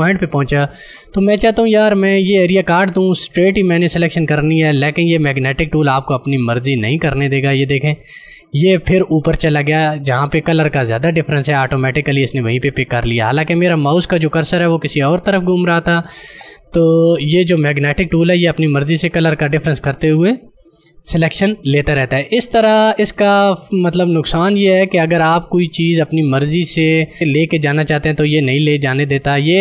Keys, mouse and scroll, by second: 15.1 click, 15.3 space, 23.2 space, 23.8 click, 23.9 space, 24.3 space.